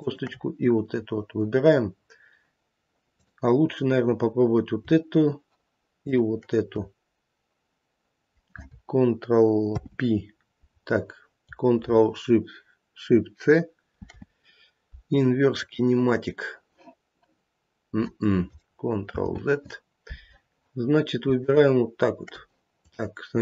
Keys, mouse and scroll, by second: 0.9 scroll up 3, 3.1 click, 6.0 shift+click, 9.6 ctrl+p, 13.9 ctrl+shift+c, 19.1 ctrl+z, 21.3 shift+click, 22.7 click.